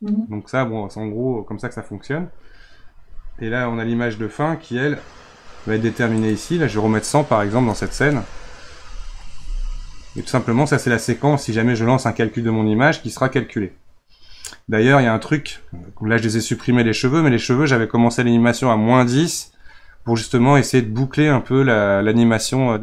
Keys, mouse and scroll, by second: 4.8-5.3 scroll down 3, 6.1 click, 7.8 KP_0, 10.2-22.0 drag.